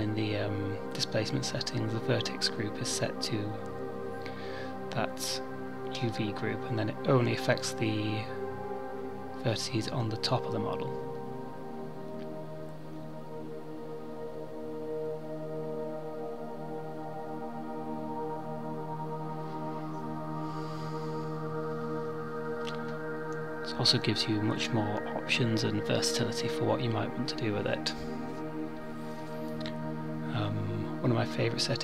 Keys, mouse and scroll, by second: 0.9 scroll down 1, 1.7 click, 2.8 middle click, 4.4-4.8 scroll up 2, 5.0 middle click, 8.1 click, 14.4 click, 20.9 click, 22.0 click, 24.5 click, 28.8 middle click.